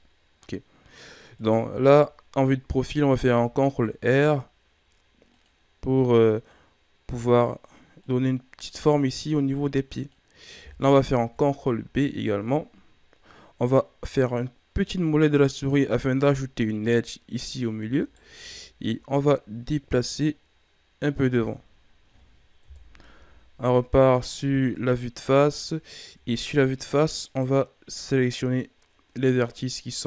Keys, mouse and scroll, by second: 0.8-1.3 scroll up 2, 1.3 right click, 1.7 Tab, 3.1 ctrl+r, 6.5-11.0 drag, 11.2 ctrl+b, 17.9 alt+right click, 18.5 shift+scroll down 2, 18.9-19.5 scroll up 1, 19.6-21.3 drag, 21.3 Tab, 21.7-22.6 scroll down 3, 22.6 KP_1, 23.1 a, 23.6 scroll down 5, 24.6-25.4 scroll up 8, 25.4 shift+scroll down 3, 25.8 scroll up 1, 26.1 Tab, 27.3 right click, 29.6 scroll down 1, 29.8-30.0 middle drag.